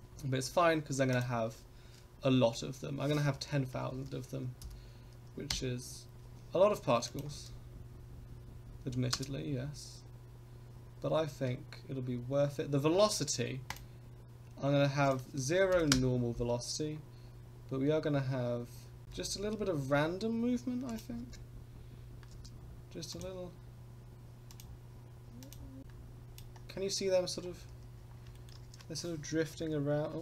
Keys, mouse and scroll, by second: 1.1-6.3 drag, 7.3 click, 7.5 space, 9.4 space, 12.2-13.7 scroll down 2, 13.7 click, 15.0-16.8 drag, 16.8 scroll down 1, 19.0 click, 21.1-22.5 drag, 21.3 space, 22.5 space, 23.1 click, 24.5 click, 25.4 click, 25.8-26.4 drag, 25.8 space, 27.5-28.0 scroll up 5, 28.3 shift+middle drag, 29.5 KP_0.